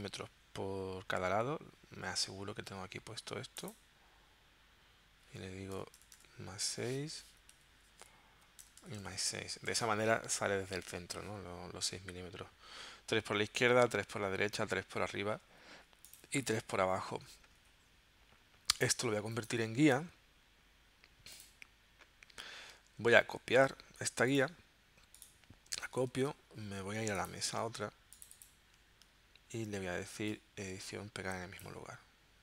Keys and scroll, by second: 5.8 BackSpace, 7.0 6, 7.5 Tab, 8.4 Right, 8.6 BackSpace, 9.9 6, 10.4 Tab, 23.3 super+c, 26.0 super+c.